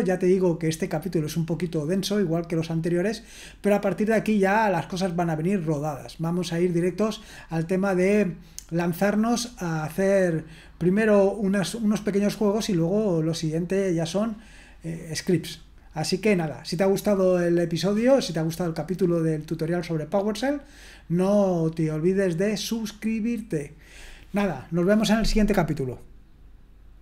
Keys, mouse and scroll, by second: 26.9 click.